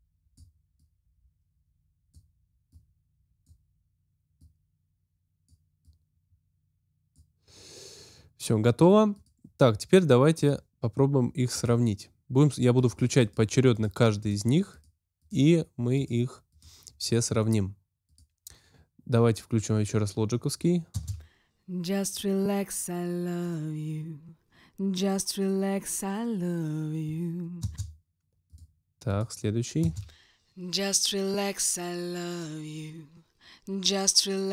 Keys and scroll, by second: 20.9 space, 27.6 space, 29.8 space.